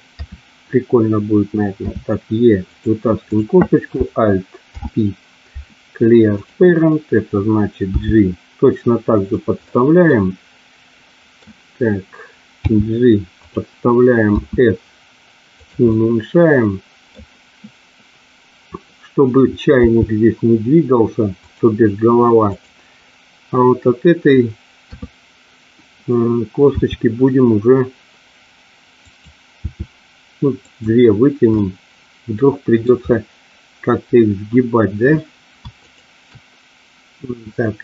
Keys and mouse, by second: 0.1 KP_3, 1.8 e, 4.6 alt+p, 7.8 g, 9.1 click, 10.0-11.4 middle drag, 12.6 g, 13.3 click, 14.3 s, 15.5 click, 15.9-17.1 middle drag, 19.8 g, 21.4 click, 22.4 click, 24.8 KP_3, 26.7 e, 29.0 click, 29.7 e, 30.5 click, 31.5-32.8 middle drag, 35.8 shift+click.